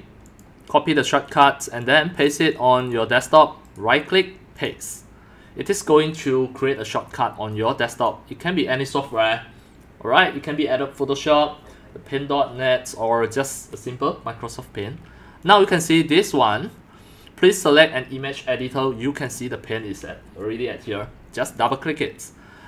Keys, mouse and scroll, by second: 0.1 right click, 0.4-2.3 drag, 2.9 click, 3.8-13.2 drag, 15.5-21.9 drag.